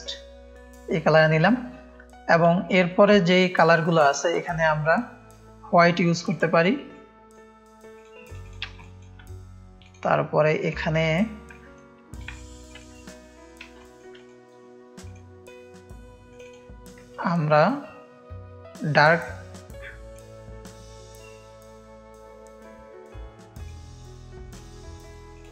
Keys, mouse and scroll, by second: 0.9 click, 1.5 click, 1.5 space, 4.2 click, 6.1-7.3 drag, 7.9 drag, 8.2 click, 8.7 space, 9.8 click, 10.6-11.7 drag, 11.5 space, 12.2 space, 12.3 click, 12.6 click, 13.7 click, 13.8 space, 14.1 drag, 15.0 click, 19.2 click, 23.6 click, 25.3 click.